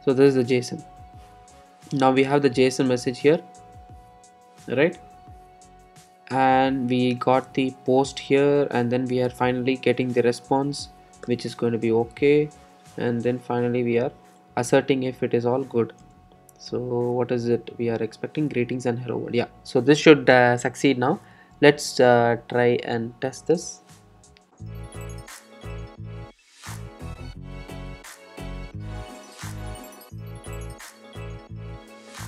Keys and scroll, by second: 6.3 super+s, 10.8 alt+super+l.